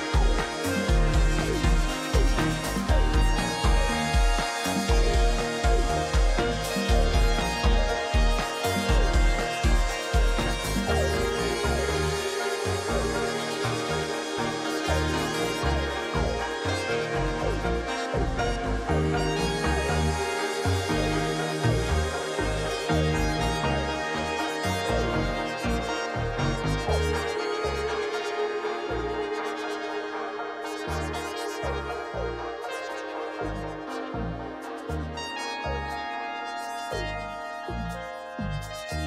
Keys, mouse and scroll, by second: 0.2 ctrl+t, 1.4 alt+click, 7.8 alt+click, 24.6 ctrl+j, 24.8 ctrl+j, 26.7 ctrl+t, 33.5 click, 34.3 ctrl+j, 36.0 ctrl+z, 37.1 double click.